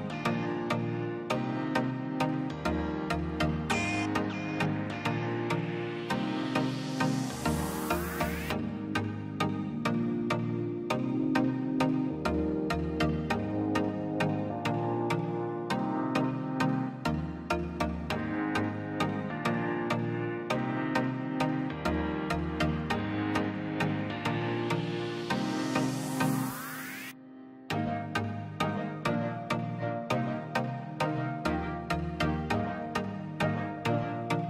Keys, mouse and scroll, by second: 0.0 click, 0.2-1.3 scroll up 1, 1.7 click, 2.9 m, 3.5 scroll up 1, 3.7 click, 4.7-5.3 scroll down 1, 6.1 l, 6.1 space, 6.3-6.6 scroll up 1, 8.7 click, 8.8-9.3 scroll down 1, 11.7 scroll down 1, 13.1 click, 13.3 scroll up 1, 14.0 click, 14.7 m, 15.2-15.7 scroll up 1, 15.7 click, 17.8 click, 18.0 space, 18.3 p, 18.5 scroll down 1, 18.7 click, 19.3 ctrl+z, 19.6 scroll down 1, 20.0 l, 20.1-20.5 scroll up 1, 20.7 click, 21.4 m, 21.7-22.2 scroll up 1, 22.2 click, 22.7-23.3 scroll down 1, 23.3 middle click, 23.9 click, 24.1-24.6 scroll up 1, 25.1 p, 25.4 click, 26.4 scroll down 1, 26.8 middle click, 27.0 scroll up 1, 27.4 click, 28.4 middle click, 28.9 scroll down 1, 29.1 middle click, 29.4 space, 29.6 click, 31.5-31.9 scroll up 1, 32.8 click, 34.1-34.4 scroll down 1.